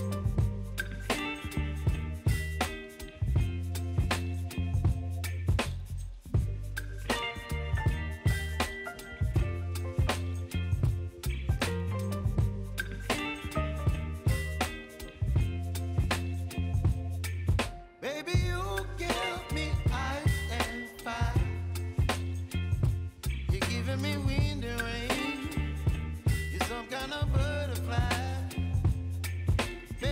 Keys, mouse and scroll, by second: 0.0-1.9 typing, 2.7 click, 5.1 click, 15.2 ctrl+y, 16.5-23.4 drag, 23.4 Return, 25.5-30.1 drag.